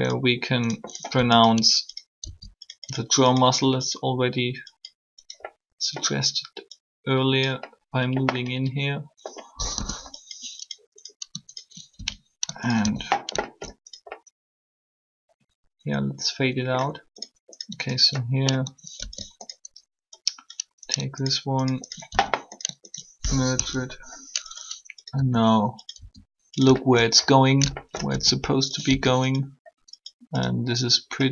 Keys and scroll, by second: 2.2 shift+s, 9.6 3, 23.5 shift+3, 25.1 r, 25.8 s, 28.1 alt+s, 28.9 r.